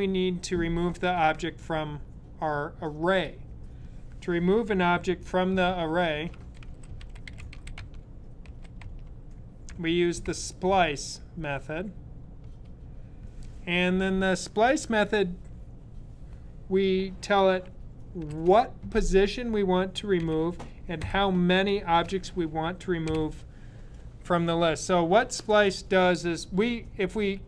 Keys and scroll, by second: 5.9-10.5 typing, 18.1 typing, 20.0-20.9 typing, 21.9-22.9 typing.